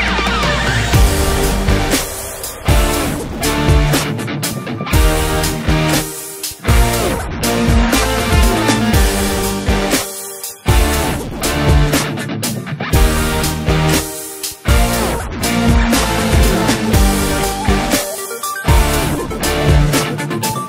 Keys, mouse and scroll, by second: 3.7 click, 4.8 click, 5.0-6.1 drag, 6.6-9.6 drag, 9.8 click, 11.0 click.